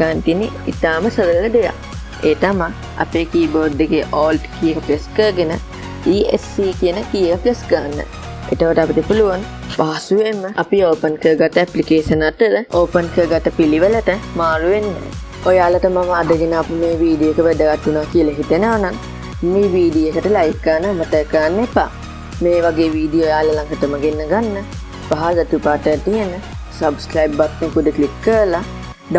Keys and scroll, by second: 7.3 alt+Escape.